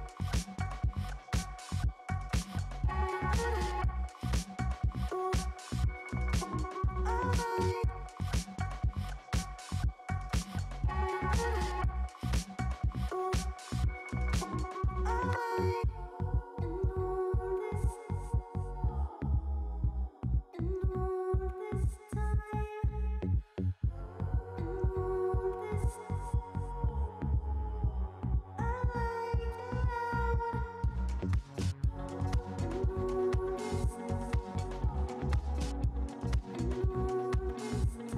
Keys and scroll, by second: 0.6 ], 1.0 [, 1.9 space, 4.1 space, 7.1 [, 10.6 ], 12.8 [, 14.7 ], 16.4 ], 18.8 space, 19.1 space, 28.8 [, 31.1 [, 32.9 space, 35.5 space.